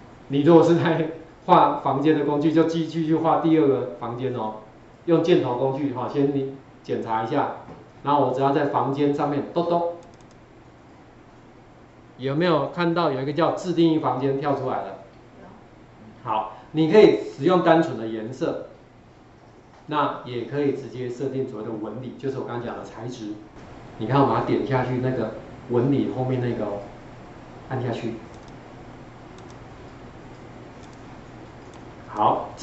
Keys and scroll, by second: 12.6 ctrl+4, 12.9 ctrl+4, 26.9 ctrl+4.